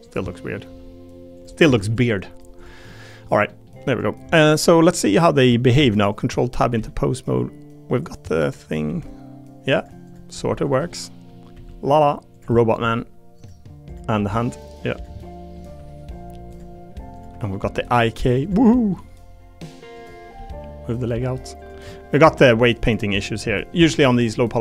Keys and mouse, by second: 0.2 click, 0.6 g, 1.3 click, 1.6 Tab, 1.8 click, 2.9 click, 3.1 middle click, 3.5 middle click, 5.1 click, 5.7 ctrl+Tab, 6.1 click, 6.3 middle click, 6.7 r, 8.3 middle click, 8.6 click, 8.8 r, 9.7 click, 10.3 r, 10.9 middle click, 11.5 r, 12.3 click, 12.5 middle click, 12.8 r, 13.9 click, 14.1 r, 15.2 middle click, 15.6 r, 17.5 click, 17.8 g, 18.6 click, 19.9 click, 20.3 g, 21.2 r, 21.9 click, 22.3 g, 23.5 click.